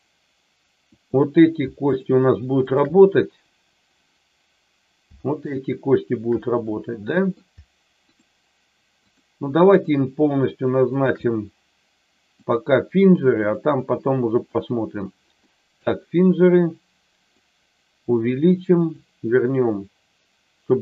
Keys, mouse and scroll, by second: 0.9 click, 1.9 shift+click, 5.2 shift+click, 6.6 middle click, 8.1 shift+click, 8.9 shift+click, 10.8 shift+click, 12.4-13.6 drag, 15.5 middle click, 17.2-18.3 drag, 19.0-20.8 drag.